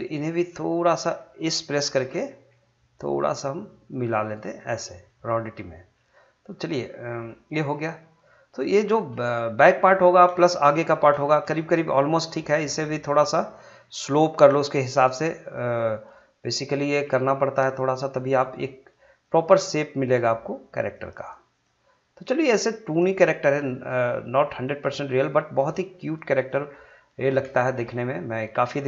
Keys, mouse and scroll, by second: 2.3 s, 4.2 click, 4.6 scroll down 1, 4.8 middle click, 5.3-5.9 scroll up 1, 5.9-9.3 middle drag, 8.9 middle click, 9.3-11.1 shift+middle drag, 11.2-12.5 shift+middle drag, 12.6-14.9 drag, 14.9 g, 15.5 click, 17.0 g, 18.1 click, 19.4 g, 20.0 click, 21.0 g, 21.5 click, 22.5 g, 23.1 click, 24.1 g, 24.6 click, 25.8 g, 26.3 click, 26.6 scroll down 1, 27.5 scroll down 1, 27.7 middle click, 28.1 scroll up 1, 28.4-28.8 middle drag.